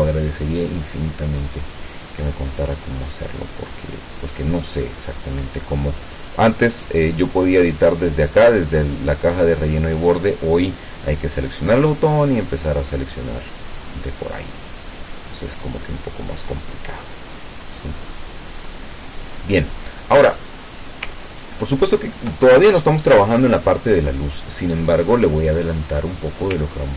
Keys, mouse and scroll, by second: 0.8 click, 5.0-6.3 drag, 13.7-19.6 drag, 20.6 click, 21.4 ctrl+scroll up 2, 26.2 click.